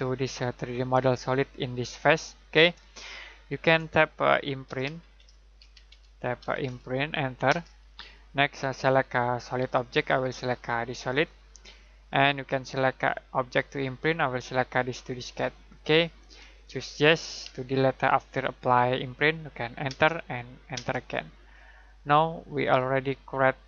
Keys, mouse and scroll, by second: 2.8 middle click, 4.6-7.4 typing, 11.0 click, 15.6 click, 19.8 Return, 22.6 click.